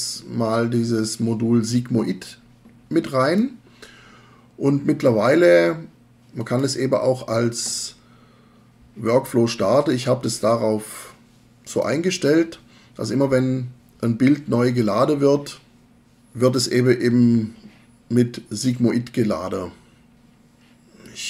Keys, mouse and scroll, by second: 11.7-16.0 drag.